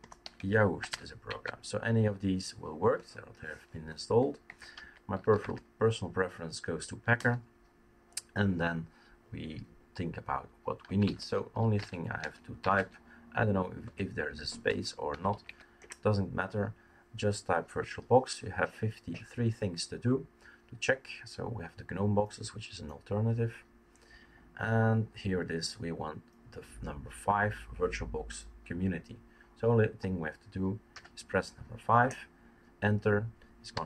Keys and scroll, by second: 0.0-1.4 typing, 2.9-5.9 typing, 6.9-7.6 typing, 10.8-13.1 typing, 14.7-15.9 typing, 32.0 Return, 32.0 typing, 33.5-33.8 typing.